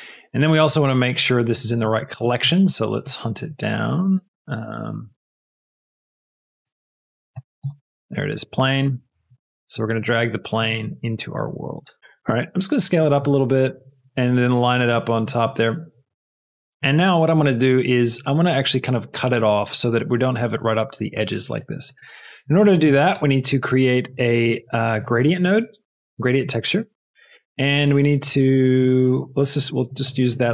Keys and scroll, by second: 12.0 Right, 12.2 s, 13.1 g, 23.0 shift+a, 25.2 a, 25.9 Return, 27.0 shift+a.